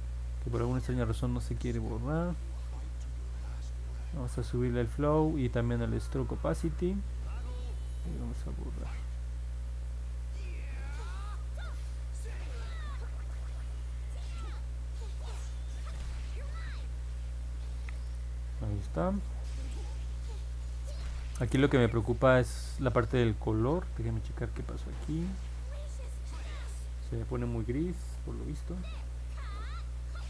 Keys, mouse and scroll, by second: 4.4 click, 5.7 click, 8.4-11.3 drag, 11.8 click, 12.4 click, 13.1 click, 13.6 click, 14.0 click, 15.3 click, 15.8 click, 16.2 click, 16.7 click, 17.0 click, 17.3 click, 17.5 click, 24.7-30.2 drag.